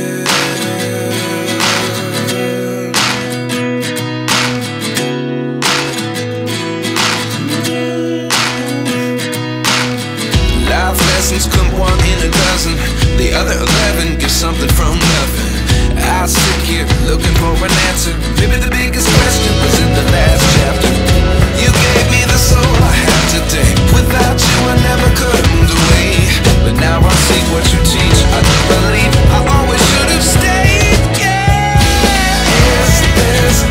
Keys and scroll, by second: 30.5 F4.